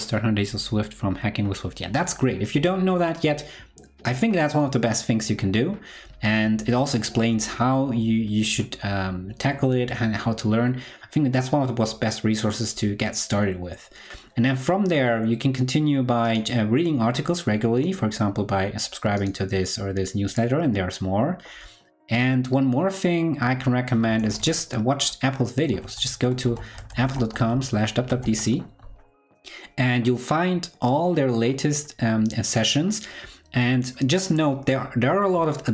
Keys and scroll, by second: 24.2 super+t.